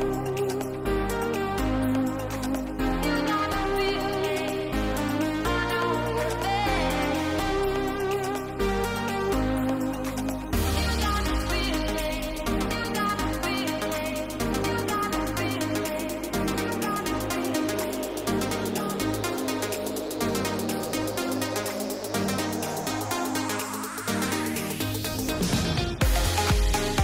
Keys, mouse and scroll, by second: 2.1 Tab, 3.0 shift+middle click, 4.4 shift+middle click, 4.7 click, 5.0 Tab, 6.3 click, 6.7 click, 7.5 g, 9.3 ctrl+click, 11.7 shift+middle click, 13.9 middle click, 14.8 click, 15.4 middle click, 18.8 shift+middle click, 19.4 middle click, 19.9 middle click, 20.7 middle click, 21.2 shift+middle click, 22.7 shift+click, 25.7-27.0 middle drag.